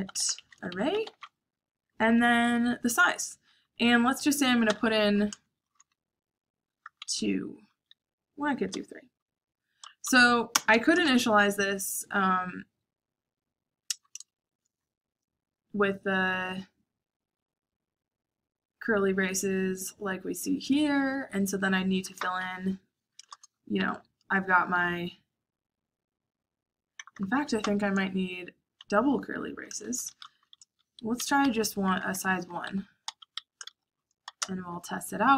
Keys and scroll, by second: 0.0-2.0 typing, 4.6 3, 6.8-8.6 typing, 9.7-10.9 typing, 14.3 shift+', 22.8-23.8 typing, 26.9 BackSpace, 27.1 BackSpace, 27.5 BackSpace, 28.9-35.3 typing, 31.1 Escape.